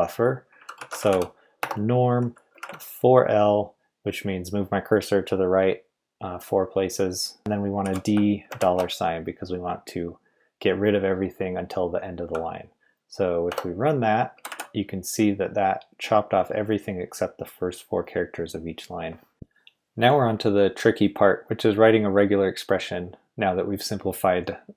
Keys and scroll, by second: 0.5-2.5 typing, 6.7-8.5 typing, 13.5 Return, 14.3 g, 14.5 g, 19.3 k.